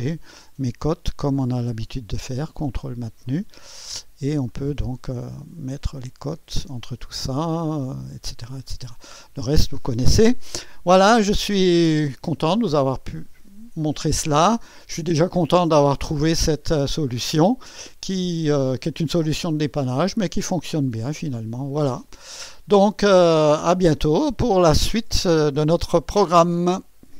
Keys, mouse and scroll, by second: 1.9 click, 2.2 click, 3.3 ctrl+click, 3.9 click, 4.5 click, 5.9-7.5 drag, 9.1-12.9 scroll down 2, 14.1 click, 15.7-18.9 drag, 19.7 click, 20.4 click, 21.0 click, 22.1 click, 23.1 click.